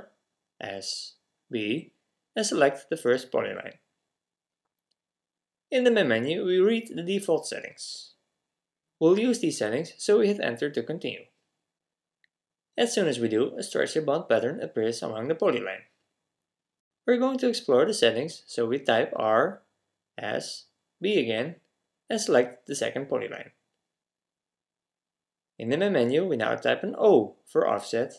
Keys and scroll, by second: 0.6-1.4 typing, 18.9 typing, 20.4-20.8 typing, 27.3 typing.